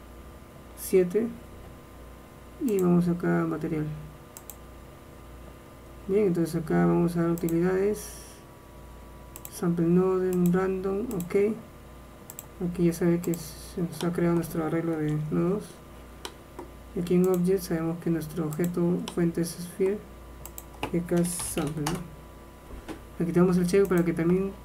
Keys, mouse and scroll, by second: 0.9 KP_7, 13.7-15.2 drag.